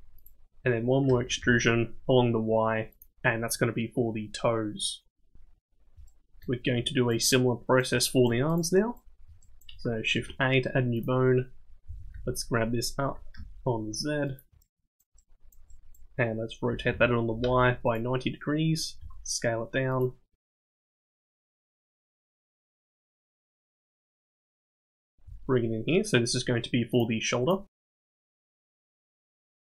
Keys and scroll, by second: 1.1 e, 10.1 shift+a, 11.9 g, 16.7 r, 19.0 s, 20.3 g, 22.5 KP_1, 25.3 g, 28.2 g.